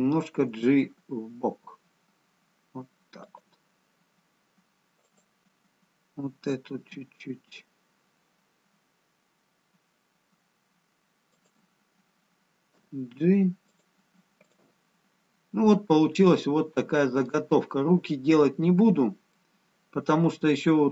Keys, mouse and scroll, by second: 0.6 g, 5.2 click, 6.9 r, 12.8 g, 14.4 click, 15.5 scroll down 2, 16.9 middle click.